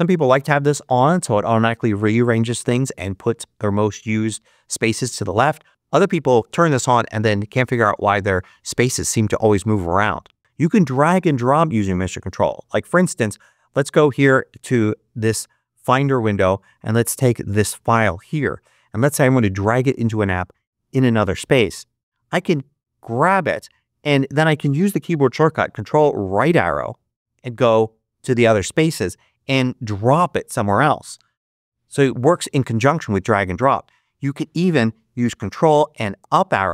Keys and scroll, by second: 26.3 ctrl+Right, 27.5 ctrl+Right, 31.1 ctrl+Left.